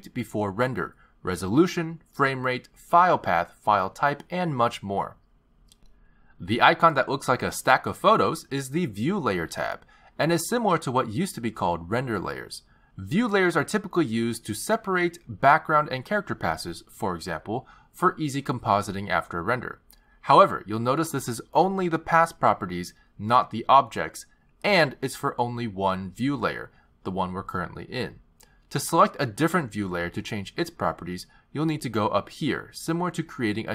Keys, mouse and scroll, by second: 1.0-2.0 scroll down 5, 2.0 scroll down 1, 9.0 click, 14.8 click, 15.4 click, 22.8 click, 23.0 click, 24.0 click, 24.3 click, 33.0 click.